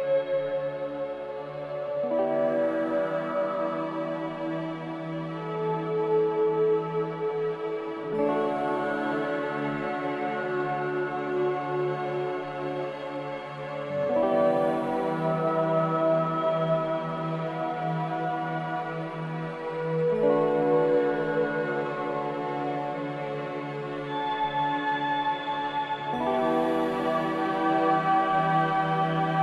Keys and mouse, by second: 1.8 shift+click, 2.2 middle click, 2.8 middle drag, 5.2 shift+click, 6.7-7.8 middle drag, 10.5-11.8 middle drag, 12.3-12.8 shift+middle drag, 16.2 shift+click, 17.7 ctrl+z, 19.8 shift+click, 21.0-21.8 middle drag, 22.4 shift+middle click, 25.8 shift+click, 27.8 middle click, 29.1 shift+middle click.